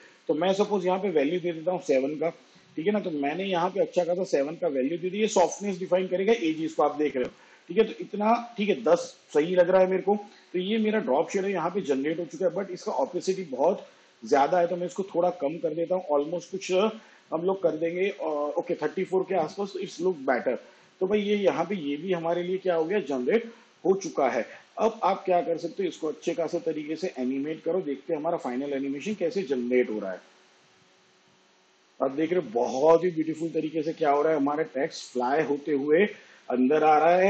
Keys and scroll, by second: 20.3 shift+/, 27.1 space.